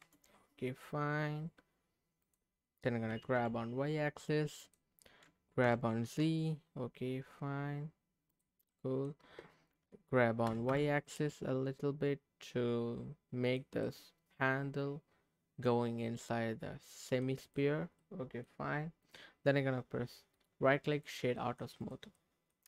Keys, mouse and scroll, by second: 2.2 click, 3.1 g, 3.3 y, 4.6 click, 5.6 g, 6.0 z, 8.3 click, 8.7 middle click, 10.5 g, 10.7 y, 13.4 click, 13.8-17.2 middle drag, 17.4 click, 17.7 scroll down 2, 18.0 middle click, 19.0 click, 20.3 right click, 21.3 middle click, 21.8 click, 22.1 scroll up 1, 22.2 middle click.